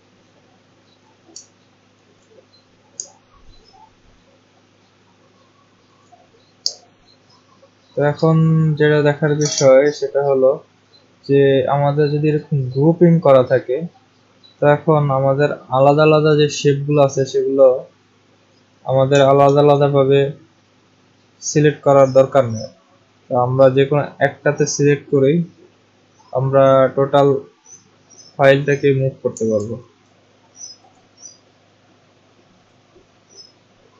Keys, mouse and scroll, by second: 1.5 ctrl+scroll up 1, 1.7 ctrl+scroll, 3.1-4.2 alt+scroll, 4.2 alt+scroll, 4.7-5.4 alt+scroll, 7.8-10.6 scroll, 8.1 click, 11.2-12.4 scroll, 12.4 click, 13.3 click, 17.9 click, 19.4 ctrl+z, 23.6 click, 28.6 click, 29.6 ctrl+z, 30.9 click, 32.7 click.